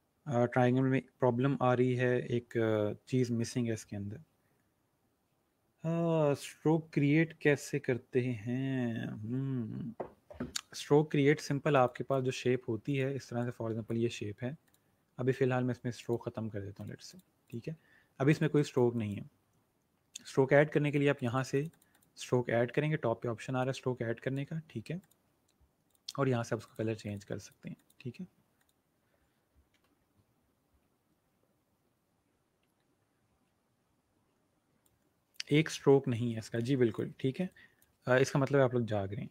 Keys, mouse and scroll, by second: 11.3-11.6 alt+scroll down 2, 11.7 space, 13.0 shift+click, 17.9-18.2 alt+scroll up 2, 18.2 click, 18.9 click, 20.9 click, 31.9-32.5 alt+scroll down 1, 33.3-33.7 scroll down 1, 33.7 space, 34.9 space, 36.1 scroll up 1, 36.3 space, 36.4 click, 36.8 space, 37.4 click.